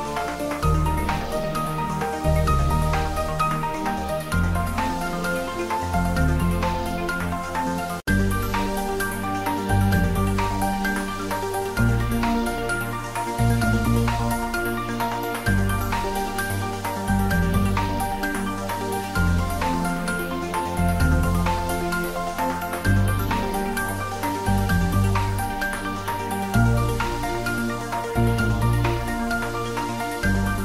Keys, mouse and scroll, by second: 0.7 middle drag, 1.5 s, 1.8-3.1 middle drag, 3.1 click, 6.1 click, 9.9 click, 10.0 s, 11.0 click, 12.9 ctrl+middle click, 13.7-14.6 typing, 15.8 typing, 15.9 middle click, 16.5 click, 16.8 Tab, 18.1 middle click, 18.8 click, 21.5 click, 23.9 click, 24.3 middle click, 25.3-27.3 drag, 27.3 Tab, 27.7 click.